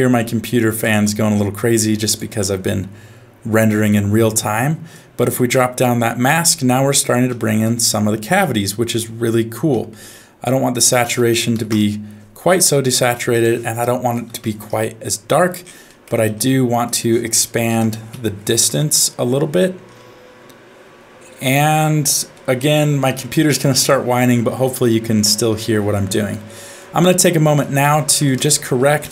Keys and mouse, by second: 0.2 g, 1.6 g, 3.6 middle click, 4.9 click, 7.3 shift+middle click, 8.5 middle click, 9.8 middle click, 10.7-11.7 drag, 13.3-14.6 drag, 15.9 middle click, 16.8-18.7 drag, 22.3 middle click, 25.6 middle click, 26.6 middle click, 27.0 click, 27.6 click, 28.2 shift+a.